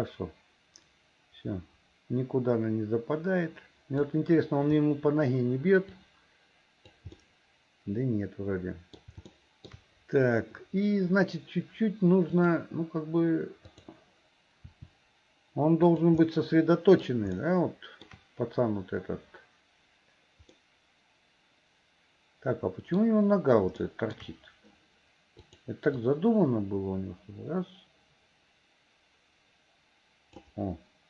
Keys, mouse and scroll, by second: 6.0-7.1 drag, 7.2-9.0 middle drag, 9.3 shift+middle click, 12.4 click, 13.7 click, 14.7 r, 16.3 middle click, 17.4 shift+middle click, 20.6-23.0 middle drag, 23.9 shift+middle click, 25.5 click, 26.1-30.5 drag.